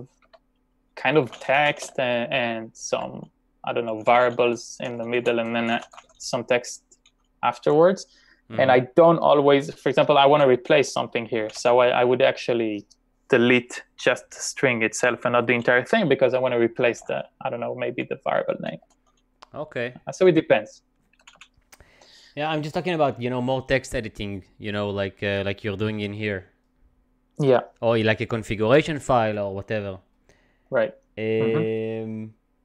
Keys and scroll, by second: 0.3-2.4 typing, 3.7-4.4 typing, 6.9-12.0 typing, 16.3 i, 16.8 o, 18.7-19.6 typing, 21.1-21.9 typing.